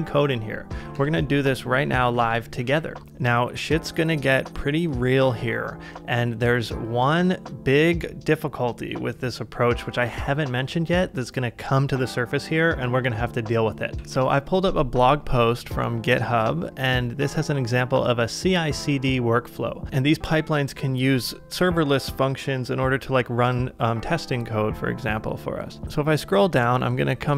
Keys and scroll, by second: 0.1-1.2 typing, 13.9 super+Tab.